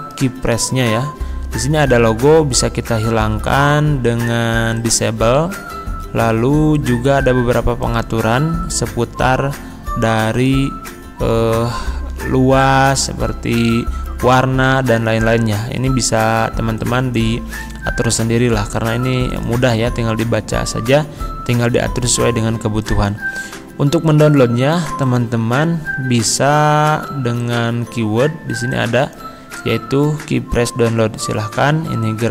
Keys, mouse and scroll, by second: 0.0 right click, 6.8 click, 7.8 right click, 25.0 click.